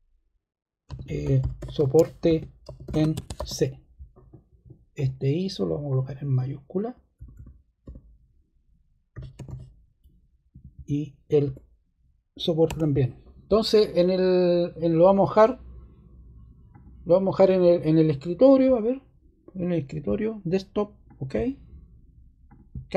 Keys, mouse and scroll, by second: 0.6-3.8 typing, 4.9 click, 5.8 click, 7.1 BackSpace, 7.3 BackSpace, 7.8 BackSpace, 8.8-9.9 typing, 10.5 Tab, 10.7 Tab, 11.4 BackSpace, 12.6 typing, 21.0 click.